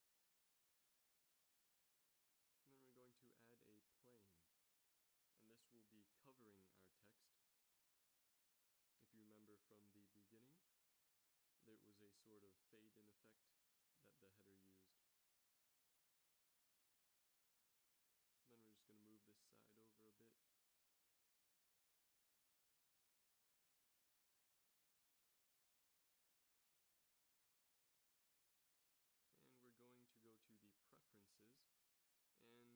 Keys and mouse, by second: 1.6 ctrl+s, 3.3 shift+a, 5.7 s, 8.4 g, 10.5 z, 11.5 Tab, 12.0 a, 12.3 b, 12.8 click, 14.2 g, 18.7 middle click, 19.5 a, 19.8 b, 22.2 g, 25.3 a, 25.8 Tab, 27.2 z, 28.7 ctrl+alt+u.